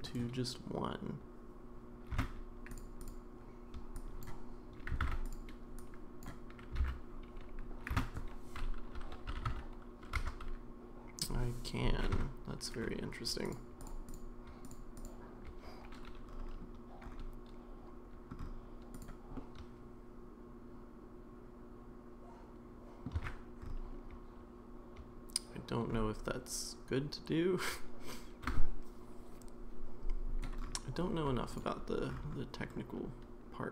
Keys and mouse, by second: 0.1-1.8 right drag, 2.2 space, 4.1 drag, 5.0 alt+z, 5.8 click, 6.8 alt+z, 7.9 space, 12.1 Tab, 13.5 click, 14.1 click, 14.6 click, 14.9 click, 19.3-23.0 middle drag, 23.1 Tab, 32.7-33.7 middle drag.